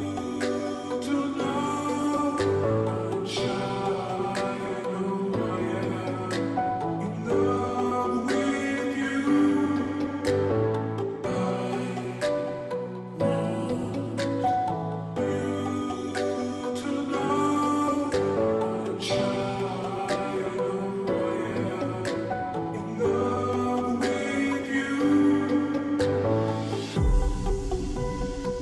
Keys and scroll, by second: 4.3 ctrl+t, 20.3 ctrl+t, 23.2 space, 23.7 space, 23.8 space.